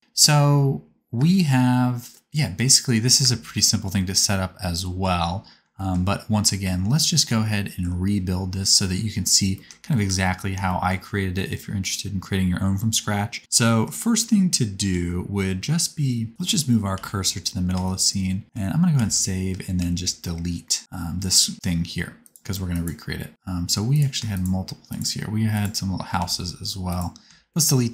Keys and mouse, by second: 1.2 space, 3.2 space, 8.3-11.8 middle drag, 10.0 n, 12.8-17.2 middle drag, 16.9 shift+c, 19.0 ctrl+s, 19.8 x, 22.7 click, 23.3 x, 24.4 shift+click, 24.9 shift+click, 26.1 x.